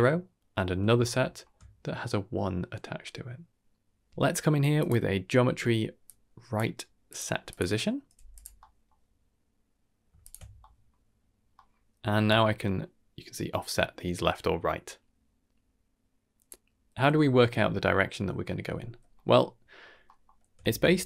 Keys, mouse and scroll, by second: 1.0 ctrl+middle drag, 3.5 middle click, 3.5 click, 3.7 shift+a, 8.6-8.9 middle drag, 10.2 ctrl+shift+click, 10.6 middle click, 11.5 middle click, 12.2-16.4 shift+drag, 19.1 middle click, 20.0 middle click, 20.6 shift+a.